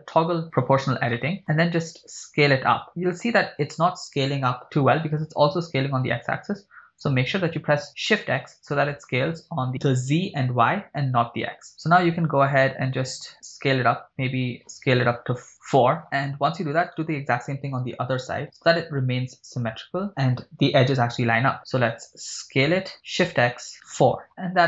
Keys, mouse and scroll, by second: 0.6 scroll down 3, 1.2 shift+middle click, 1.4 scroll down 1, 2.2 s, 2.8 scroll down 4, 8.1 shift+x, 13.1 scroll up 1, 15.6 ctrl+click, 16.0 shift+middle click, 16.2 scroll up 3, 17.0 right click, 17.8 b, 21.6 scroll down 3, 23.0 s, 23.4 shift+x, 24.0 4, 24.3 click, 24.3 shift+middle click, 24.3 scroll up 3.